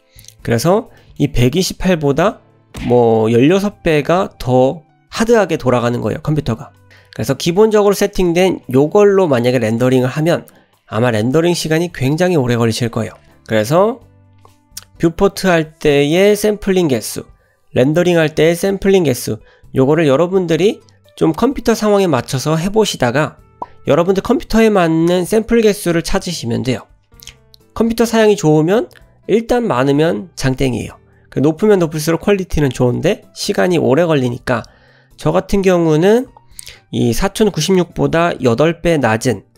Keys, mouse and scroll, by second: 1.0 middle click, 35.6-39.5 drag.